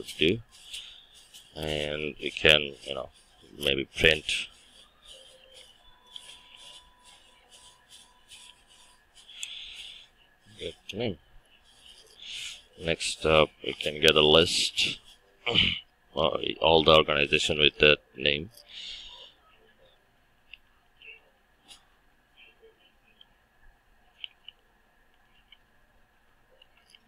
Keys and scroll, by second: 5.7 Return, 21.8 Return.